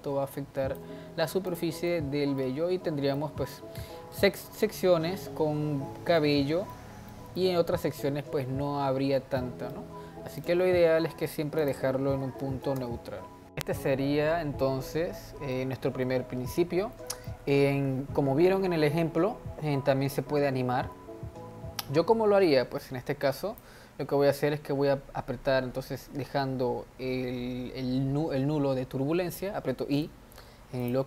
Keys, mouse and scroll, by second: 1.6 drag, 1.9-2.7 middle drag, 2.7-3.1 scroll up 2, 3.2-9.1 middle drag, 9.1-9.5 scroll down 2, 9.5-10.4 middle drag, 10.4 click, 11.7-13.5 drag, 15.5-16.4 middle drag, 16.4-16.9 scroll down 1, 16.9-21.6 shift+middle drag, 22.8-25.9 drag.